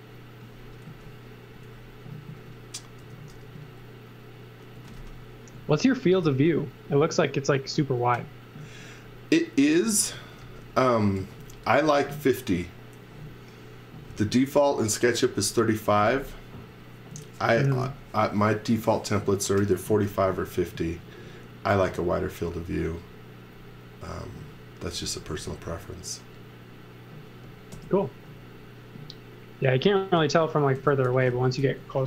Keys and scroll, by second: 0.5-3.3 typing, 4.5-6.2 typing, 8.6-11.6 typing, 20.7 z, 22.4 b, 25.0 x, 25.3 v, 27.7 l, 30.7 super+z, 30.8-32.0 typing.